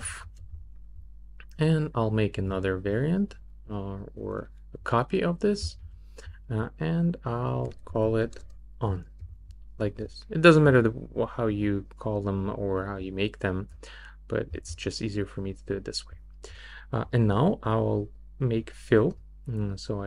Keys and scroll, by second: 0.1 f, 7.8 Right, 8.2 BackSpace, 9.2 n.